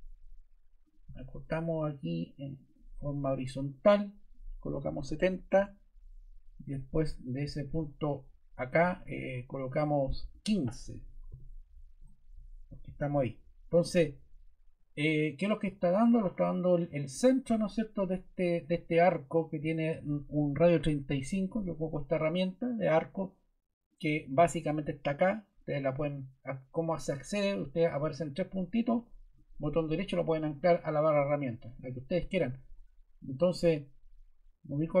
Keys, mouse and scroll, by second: 2.6 click, 4.6-5.4 typing, 6.7 typing, 10.8-11.7 typing, 11.9 Return.